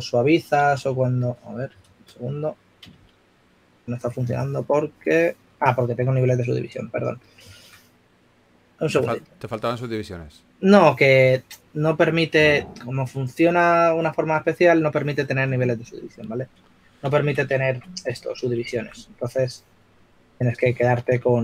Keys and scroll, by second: 1.0 shift+f, 2.0 3, 3.4 shift+f, 4.7 3, 18.4 super+d, 18.9-19.9 typing.